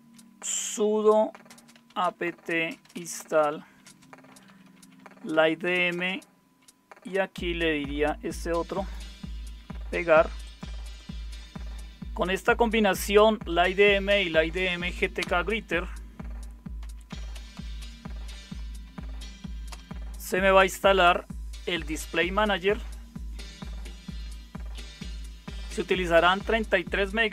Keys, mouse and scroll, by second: 0.2-6.1 typing, 12.6 Tab, 15.1 Return, 16.5-19.4 typing, 19.6 Return.